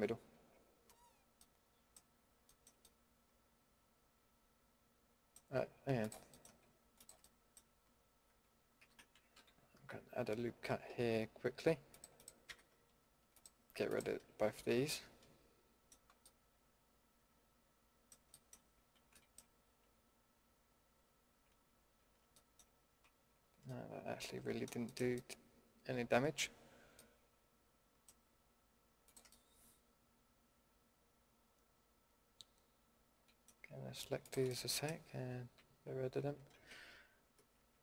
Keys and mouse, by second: 1.4-4.7 middle drag, 6.0-7.2 middle drag, 7.2 click, 8.8 a, 9.3 ctrl+e, 10.8 ctrl+r, 12.4 a, 14.5 ctrl+x, 18.4-19.1 middle drag, 19.7 ctrl+z, 23.0 ctrl+x, 29.0-30.9 middle drag, 34.5-35.6 middle drag, 35.6 ctrl+x, 37.3 ctrl+z.